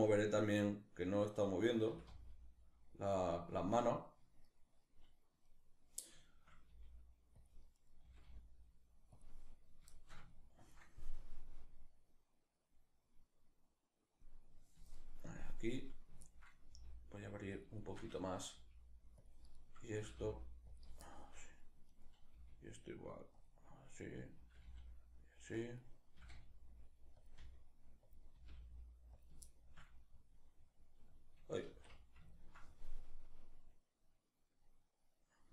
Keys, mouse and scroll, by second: 0.2-1.5 right drag, 1.5 r, 2.8 click, 3.1-4.1 shift+middle drag, 4.1 right click, 5.1 right click, 5.8-7.1 shift+middle drag, 6.3 g, 7.1 click, 7.4 right click, 7.6 r, 8.8 click, 9.6-10.8 shift+middle drag, 10.8-14.6 drag, 14.6-15.4 shift+middle drag, 15.4 right click, 15.8-17.2 ctrl+middle drag, 16.3 g, 17.2 click, 17.4-18.9 shift+middle drag, 18.2 g, 18.9 click, 19.2 right click, 19.6 r, 20.4 click, 20.7-21.6 shift+middle drag, 21.6 right click, 22.0 g, 23.0 click, 23.6 right click, 24.0 r, 25.3 click, 25.8 r, 26.9 click, 27.0 r, 27.8 click, 28.0 r, 28.8 click, 29.1-32.6 shift+middle drag, 31.3 alt+o, 31.5 alt+q, 32.6-35.5 drag.